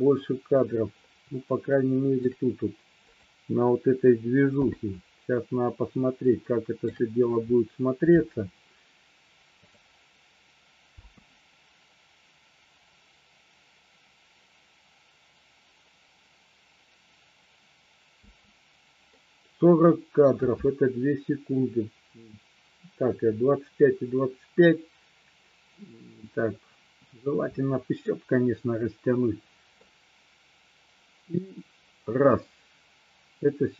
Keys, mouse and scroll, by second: 1.6-2.3 shift+middle drag, 3.2 click, 6.4-6.9 shift+middle drag, 9.7 click, 11.1 space, 18.3 space, 19.2-20.3 middle drag, 28.2-29.8 middle drag.